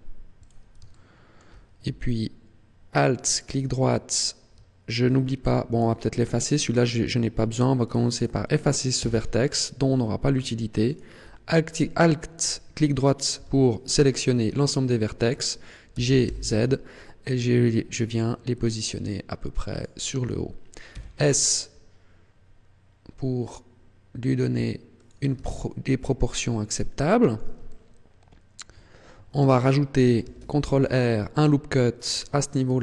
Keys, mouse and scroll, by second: 0.4 click, 0.8 shift+middle click, 3.2 alt+right click, 3.7 middle click, 5.6 right click, 7.8 right click, 8.1 right click, 8.9 x, 10.9 alt+right click, 13.3 KP_1, 14.5 shift+middle click, 15.9 g, 19.8 click, 20.9 s, 25.1 click, 25.4 shift+middle click, 27.6 shift+middle click, 30.1 ctrl+r, 32.1 click, 32.6 s.